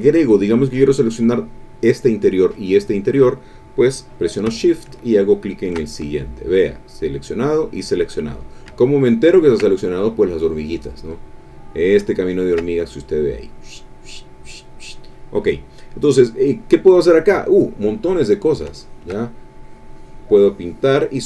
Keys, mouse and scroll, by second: 5.4 shift+click, 8.8 ctrl+click, 12.0 ctrl+click, 16.0 click, 17.7 click, 18.7 shift+click, 19.4-21.2 shift+drag.